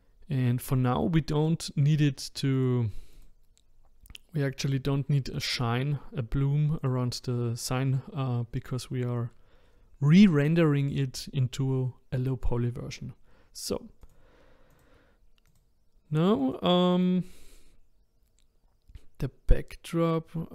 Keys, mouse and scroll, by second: 1.4 click, 2.6-3.2 drag, 6.8 click, 14.0 click, 14.7 click, 15.5 click, 16.4 click, 16.9 click.